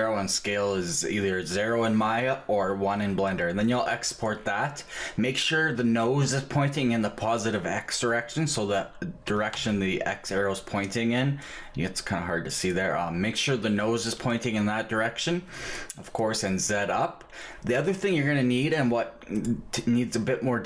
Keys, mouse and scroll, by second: 9.3 g.